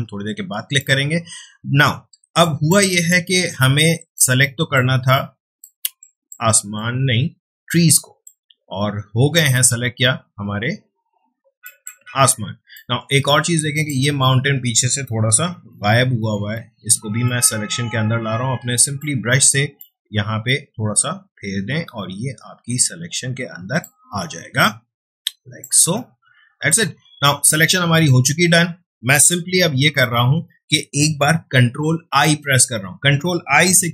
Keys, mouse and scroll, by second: 0.4 space, 0.7-2.5 ctrl+drag, 2.5 space, 2.7 click, 3.1 space, 3.5 click, 4.4 click, 5.1 click, 5.3 space, 6.0 click, 6.5 space, 6.7-10.7 ctrl+drag, 11.6 click, 12.4 ctrl+space, 12.7-15.3 ctrl+drag, 15.3-17.0 typing, 17.2-25.7 drag, 25.7 space, 25.9-27.9 ctrl+drag.